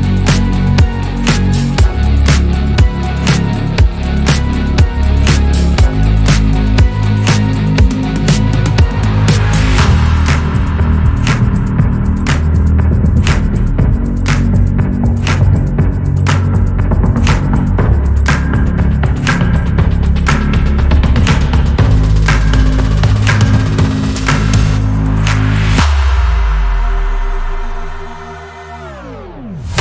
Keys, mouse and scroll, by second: 0.9 click, 3.0 click, 4.3 g, 5.7 drag, 6.2 alt+z, 6.4 scroll down 1, 7.0 scroll down 6, 7.1-8.6 middle drag, 8.6 KP_3, 9.1-9.7 scroll up 9, 9.7 click, 10.3 Tab, 10.8 Tab, 11.6 s, 13.3 click, 14.4 click, 14.7 drag, 15.2 g, 16.6 alt+z, 17.5 g, 18.7 drag, 19.4-20.1 scroll down 1, 20.1 alt+z, 21.0 alt+z, 21.3-21.7 scroll up 2, 21.7 click, 22.4 g, 23.7 z, 24.5 z, 25.9 alt+z, 26.3-27.0 scroll down 10, 27.2-28.0 middle drag, 28.0 scroll up 1.